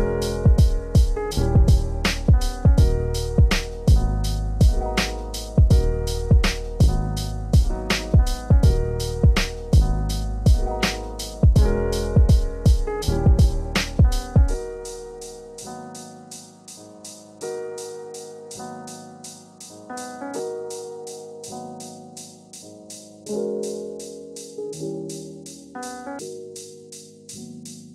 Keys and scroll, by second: 27.1 ctrl+space.